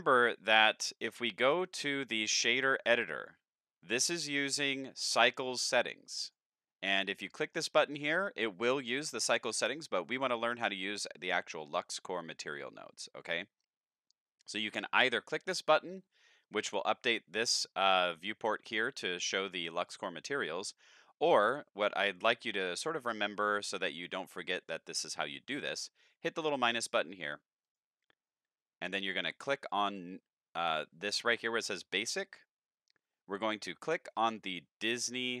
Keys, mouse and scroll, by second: 1.0-3.2 drag, 4.3 click, 4.9-6.3 drag, 27.6 click, 34.9 click.